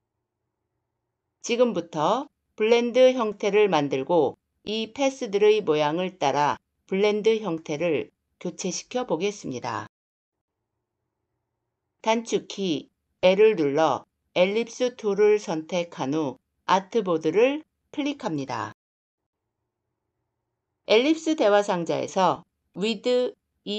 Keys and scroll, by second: 13.1 c.